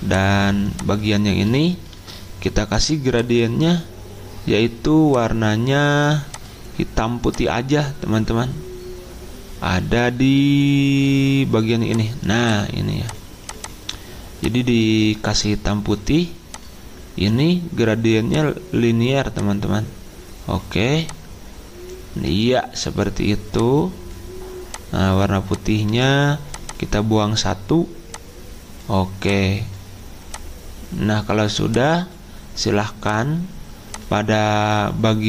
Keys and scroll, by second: 2.0 ctrl+z.